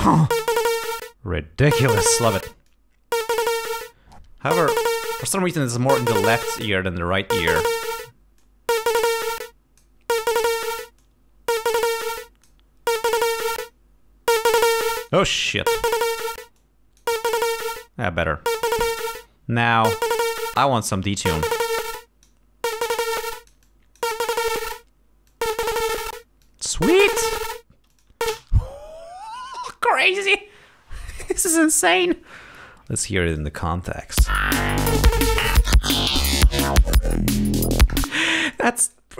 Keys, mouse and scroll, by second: 2.8-4.1 drag, 7.6 click, 8.5-10.1 drag, 11.1 click, 12.2 click, 13.5 click, 14.8 click, 15.6 click, 16.7 click, 21.1 click, 22.0 click, 23.3-24.3 drag, 24.5 click, 25.4 click, 26.5 click, 28.0 click, 28.7 space, 33.4 click, 34.0 click, 34.3 space, 38.2 space, 38.4 click, 39.0 click.